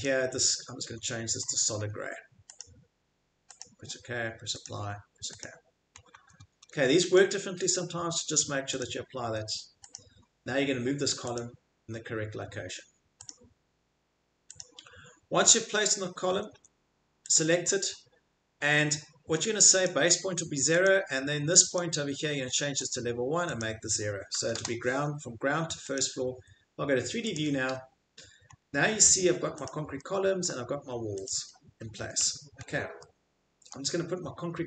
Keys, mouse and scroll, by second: 0.0 click, 0.9-1.6 scroll, 1.8 middle click, 2.6 click, 3.5 scroll, 3.6 click, 4.6 click, 5.4 click, 5.9 middle click, 6.1 middle click, 6.2 Escape, 6.4 Escape, 6.6 Escape, 9.2 Escape, 13.3 click, 14.5 click, 16.2 Escape, 16.5 Escape, 22.9 click, 23.5 click, 24.3 0, 24.5 Return, 26.0 click, 26.2-26.8 middle click, 27.3 click, 28.1 middle click, 28.5 middle click, 29.7 click, 31.2 click, 31.5 middle click, 32.0 Escape, 32.2 Escape, 33.8-34.6 shift+middle click.